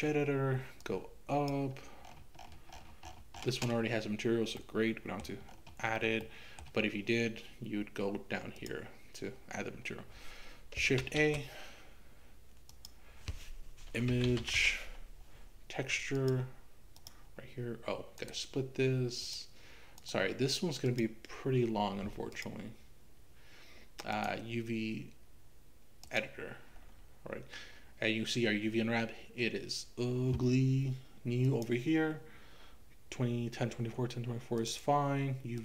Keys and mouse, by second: 0.8 click, 4.6 middle click, 6.4 middle click, 11.0 shift+a, 19.3 click, 20.0-22.5 right drag, 24.2-26.2 drag, 31.5-35.6 drag.